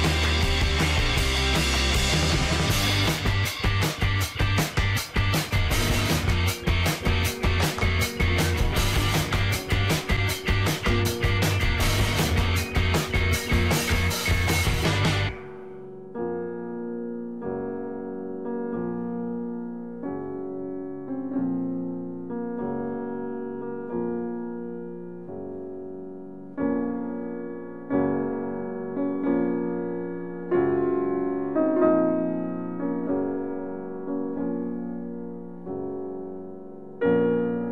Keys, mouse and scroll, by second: 4.7 scroll up 1, 5.0-8.8 middle drag, 8.8 e, 10.1 z, 18.4 click, 19.5-23.9 middle drag, 24.0 s, 25.6 x, 37.6 click.